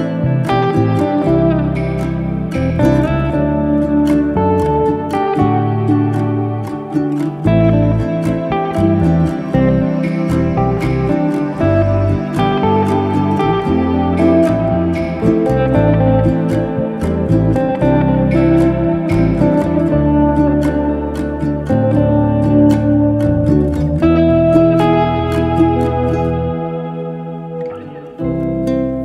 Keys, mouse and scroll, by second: 0.0 f, 0.2-0.7 middle drag, 0.7-1.2 scroll down 1, 1.2 click, 1.4 a, 2.7 a, 3.3 shift+middle click, 3.6 f, 3.7 middle click, 4.4 e, 6.8 shift+middle click, 7.5 alt+z, 7.7 scroll up 1, 7.9 shift+middle click, 8.4 ctrl+z, 9.2 e, 11.0 click, 11.3 shift+click, 11.9 e, 13.0 shift+click, 13.2 shift+click, 13.5 shift+click, 14.0 shift+click, 14.4 shift+drag, 14.9 1, 15.3 s, 17.3 g, 18.7-19.0 scroll down 6, 19.0-19.5 middle drag, 19.5 Tab, 19.7 drag, 19.9 scroll down 1, 20.2-21.3 middle drag, 21.3 scroll down 1, 21.6-23.1 middle drag, 23.3-24.2 scroll up 2, 24.2-24.6 scroll down 3, 24.6-24.9 scroll up 2, 24.9-26.4 middle drag, 26.4 scroll down 1, 26.6-28.1 middle drag.